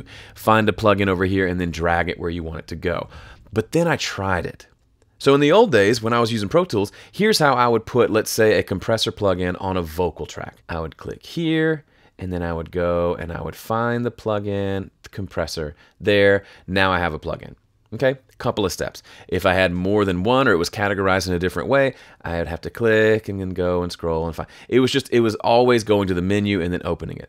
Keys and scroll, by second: 4.7 F3.